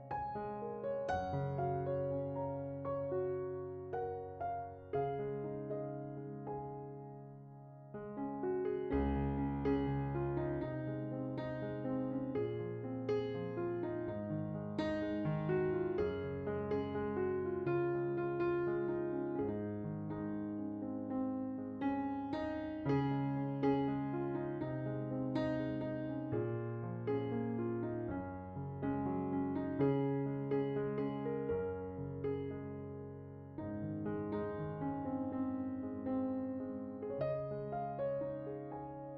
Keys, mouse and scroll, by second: 6.0-6.3 scroll up 6, 7.1-8.6 drag, 8.9 click, 9.1-10.3 drag, 10.3 scroll up 5, 10.5 click, 11.9 click, 12.9 drag, 13.7-15.4 drag, 18.4 ctrl+shift+click, 20.2 click, 21.7-22.4 drag, 22.7 click, 24.8 click, 25.3 right click, 26.7 click, 27.7 shift+d, 31.8 click, 33.1 click, 34.8 click, 37.0 click, 38.8 click.